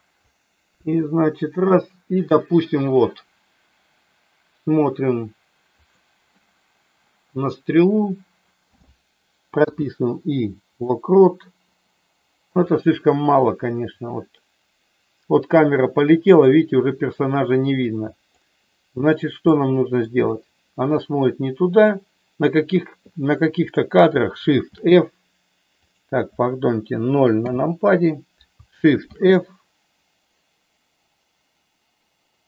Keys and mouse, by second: 0.7 Up, 9.5 i, 12.7-18.5 drag, 19.5 middle click, 24.6 shift+f, 27.4 KP_0, 29.0 shift+f.